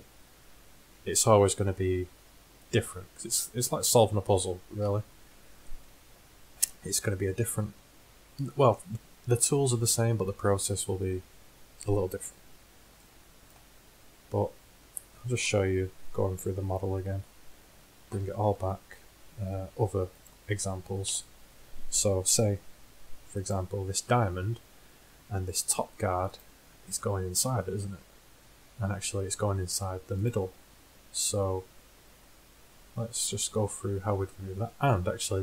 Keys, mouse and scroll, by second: 4.9 KP_1, 9.2-11.1 middle drag, 17.2 Tab, 18.4 alt+h, 20.3 click, 20.8 click, 21.1 h, 24.0 z, 24.9-27.4 middle drag, 28.4-30.3 middle drag, 34.4-35.4 middle drag.